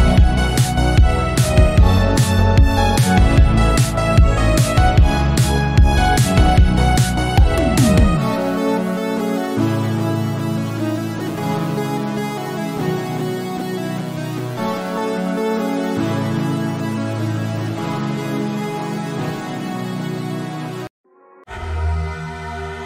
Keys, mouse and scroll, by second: 0.4 s, 1.7-2.9 drag, 4.3 scroll down 2, 4.5 click, 4.7 middle click, 5.4-6.0 scroll up 2, 6.0 click, 7.0 middle click, 7.5 click, 7.7 KP_3, 8.3 scroll up 1, 8.5 scroll down 1, 9.1 scroll down 5, 9.2 middle click, 9.5-9.8 scroll up 1, 9.8-11.0 drag, 11.4-12.4 drag, 12.4 KP_3, 12.6 scroll up 1, 12.8 click, 13.2 scroll down 2, 13.3-14.5 middle drag, 14.5 click, 15.1-15.4 scroll up 1, 15.4 shift+middle click, 15.9-17.1 drag, 17.6 click, 17.8-18.9 drag, 18.9 n, 20.2 scroll down 2, 20.4 middle click, 20.7 click, 20.8 scroll up 2, 20.9 middle click, 21.6-22.8 drag.